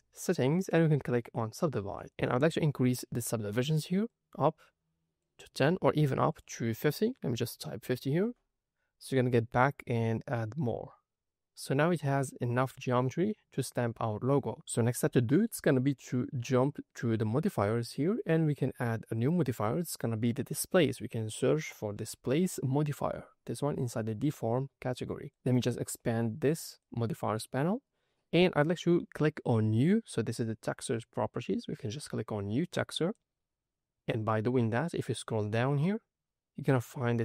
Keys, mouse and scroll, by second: 2.3 click, 4.0-5.1 drag, 6.2-8.1 drag, 9.5 click, 10.1 middle click, 11.7 middle click, 12.4 scroll up 2, 14.7 scroll down 3, 15.1 shift+middle click, 17.7 click, 19.1-25.3 drag, 25.9 click, 32.9 click, 35.7-37.2 scroll down 3.